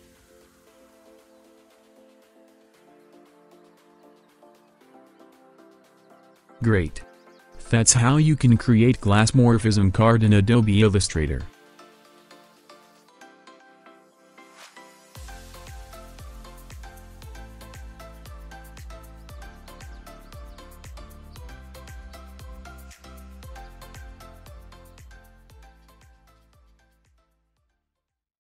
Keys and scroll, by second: 1.3 alt+space, 2.5 Delete.